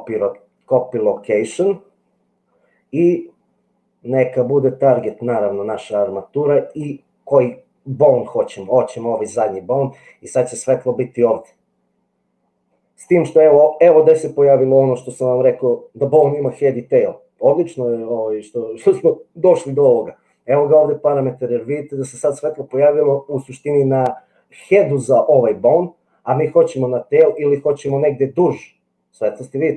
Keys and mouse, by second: 5.1 click, 6.8-9.3 drag, 27.3-29.7 drag.